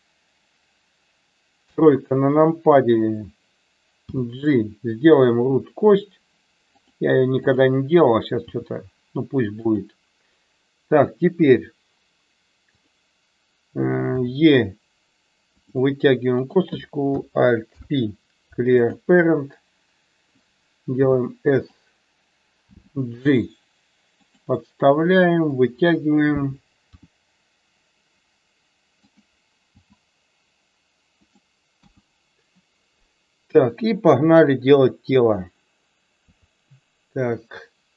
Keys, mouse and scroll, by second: 1.6 KP_3, 4.1 g, 6.7 click, 7.5 click, 8.5 g, 9.6 click, 14.2 e, 16.5 click, 17.7 alt+p, 21.1 s, 21.6 click, 22.7 g, 24.1 click, 25.6 click, 27.0 r, 29.1 click, 29.7 g, 31.3 click, 31.8 KP_1, 36.2 KP_3.